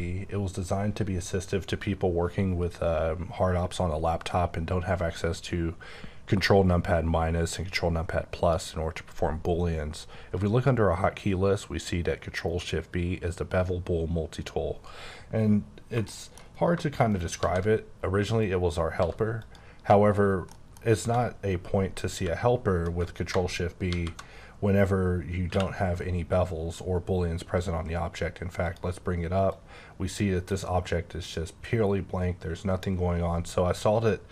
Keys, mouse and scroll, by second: 8.4 click, 15.5-15.9 scroll down 2, 16.1 shift+middle click, 16.5 scroll up 2, 17.1 shift+right click, 17.4 shift+a, 18.4 click, 19.0 s, 19.4 click, 19.9 scroll up 2, 20.5 shift+middle click, 22.2 q, 23.9 shift+b, 25.5 q, 28.6 click, 29.5 click, 30.5 click.